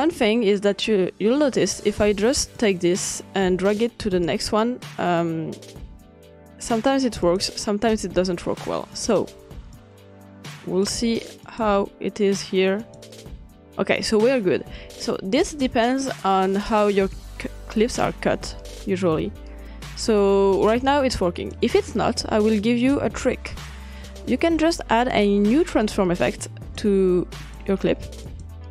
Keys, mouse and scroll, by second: 0.0-1.6 drag, 2.6-4.3 drag, 7.2 click, 9.1 click, 9.7-14.5 drag, 17.1-23.0 drag, 23.3-24.8 scroll down 2, 25.1-26.8 drag, 27.4 click, 28.3 click.